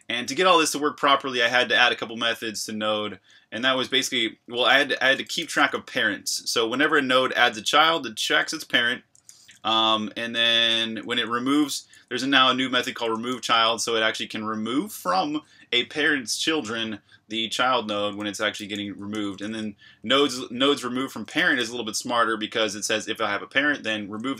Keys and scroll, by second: 0.0-2.2 typing, 3.6-5.4 typing, 9.1 Escape, 9.3-11.9 typing, 13.3-14.2 typing, 17.8 Escape, 17.9-20.1 typing, 21.3-22.1 typing.